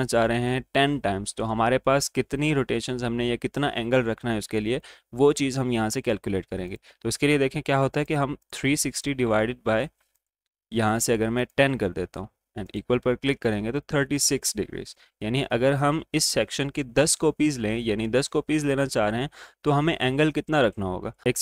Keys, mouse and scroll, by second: 6.6-16.6 drag.